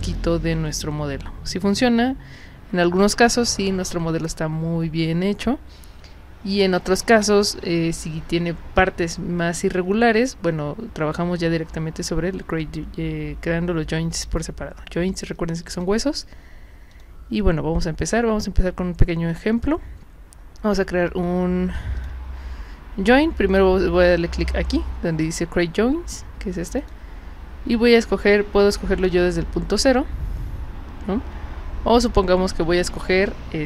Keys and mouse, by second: 15.7 click, 16.9 click, 22.0 click, 26.8 click.